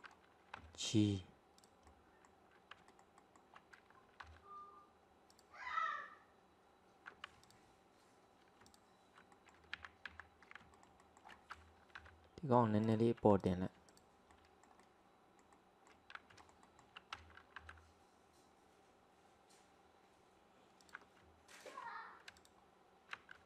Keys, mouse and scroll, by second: 0.6 g, 1.9-3.0 middle drag, 4.3 g, 5.7-7.5 scroll down 2, 7.5 alt+click, 8.7 alt+click, 9.4 middle click, 9.8 ctrl+z, 10.2 ctrl+z, 10.8 alt+middle click, 12.0 g, 13.4 alt+click, 13.9 alt+click, 14.8-16.4 middle drag, 17.6 g, 21.6 alt+click, 22.4 alt+click.